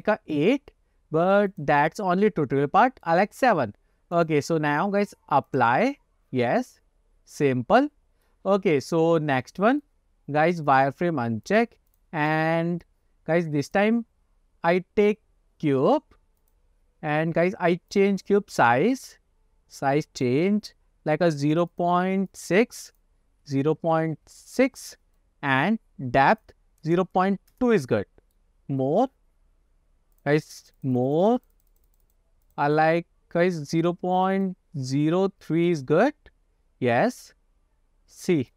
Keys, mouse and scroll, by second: 1.6 click, 2.7-3.2 middle drag, 4.2-5.8 drag, 6.6-8.4 middle drag, 8.6-9.0 scroll down 1, 9.2-9.5 scroll down 2, 9.5-9.9 middle drag, 10.8-11.9 drag, 12.0 click, 12.4 scroll up 1, 12.4 middle drag, 12.5-12.9 drag, 13.8-16.6 drag, 17.1 scroll down 2, 18.0 click, 18.9-20.3 drag, 21.5 click, 21.6 click, 21.8 click, 22.5 click, 23.0-24.9 drag, 25.3-25.7 middle drag, 26.4-27.7 drag, 28.1 middle click, 28.3 click, 28.6 scroll up 2, 28.9 middle click, 30.3 click, 30.7 click, 31.1 click, 31.4 click, 31.6 click, 31.8 click, 32.1 click, 32.6 click, 32.7 click, 34.3 click, 34.5 click, 35.8-38.5 middle drag.